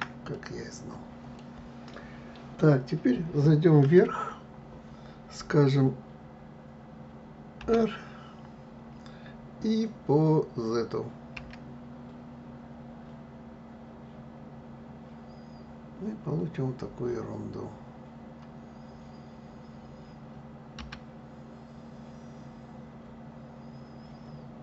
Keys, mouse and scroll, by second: 0.3-3.3 middle drag, 3.8 KP_7, 7.6 r.